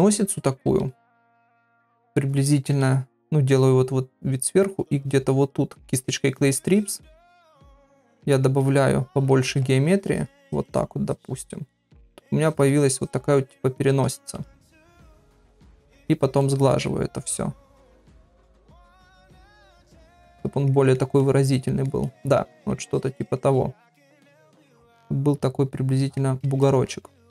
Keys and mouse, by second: 0.1 ], 0.3-1.1 ], 1.3 ], 1.5 middle click, 4.6 click, 5.0 click, 5.3 click, 6.7 click, 7.0 click, 7.3 click, 7.6 click, 7.9 middle click, 9.2-9.8 ], 9.8 click, 10.4 click, 10.6 click, 11.0 click, 11.4 click, 11.8 click, 12.4 click, 12.7 click, 13.0 click, 14.4 shift+click, 14.8 shift+click, 15.1 shift+click, 15.5 middle click, 16.6 middle click, 18.0 shift+click, 18.3 shift+click, 19.0 click, 19.3 click, 19.6 click, 20.2 click, 20.7 middle click, 21.2 middle click, 22.0 middle click, 22.9 shift+click, 23.1 shift+click, 23.4 middle click, 24.6-26.2 middle drag, 26.6 shift+middle click.